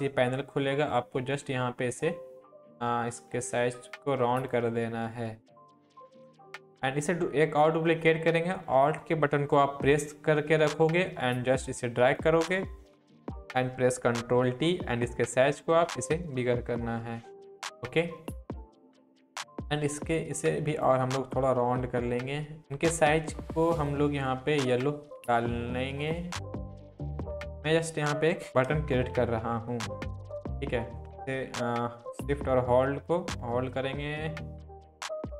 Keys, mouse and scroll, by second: 0.4 scroll down 1, 0.9-4.6 drag, 10.9 click, 11.0-11.6 alt+drag, 13.0 ctrl+t, 14.4-17.6 alt+drag, 19.2-19.9 scroll down 1, 19.9-20.8 drag, 24.0 click, 28.4 click, 29.0 ctrl+t, 30.0-30.6 alt+shift+click.